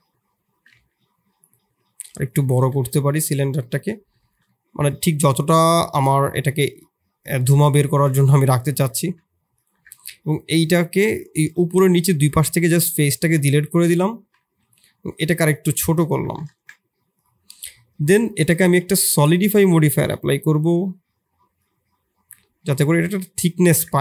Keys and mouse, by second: 0.7 g, 1.8 s, 2.6 KP_1, 3.6 middle drag, 4.4 middle drag, 5.1 middle click, 6.6-7.5 drag, 7.5 middle click, 8.1 ctrl+a, 8.9 ctrl+a, 9.7 Tab, 10.0 3, 10.5 middle click, 11.3 shift+click, 11.7 x, 13.5 middle click, 13.8 a, 14.1 s, 15.7 middle click, 16.0 Tab, 16.4 ctrl+a, 18.1 click, 18.9-20.2 drag, 21.6-23.7 shift+drag, 23.9 Tab.